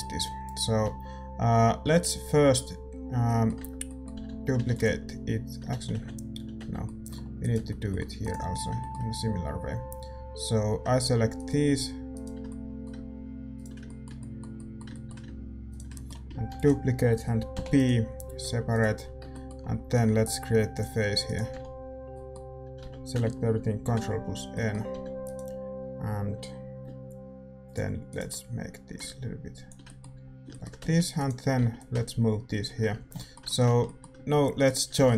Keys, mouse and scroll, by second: 3.0 scroll down 1, 3.2-5.7 middle drag, 3.5 Tab, 4.1 a, 4.2 a, 4.6 shift+d, 5.7 ctrl+z, 6.5 Tab, 6.8 middle click, 7.4-10.6 right drag, 8.5-17.8 middle drag, 11.3-17.8 right drag, 16.4 shift+d, 17.8 p, 18.4 Tab, 18.7-20.7 right drag, 19.0-20.7 middle drag, 20.7-22.6 drag, 21.2-23.8 right drag, 21.5 f, 22.6 a, 22.8 a, 23.8 ctrl+n, 24.2-25.2 middle drag, 24.9 a, 25.2-27.6 right drag, 27.6-30.8 drag, 28.0-29.8 right drag, 28.3-29.8 middle drag, 30.1 a, 30.8 middle click, 30.8 z, 31.1-32.9 right drag, 31.5 z, 31.7-33.8 drag, 32.9 Tab, 34.5-35.1 middle drag, 34.5-35.1 right drag.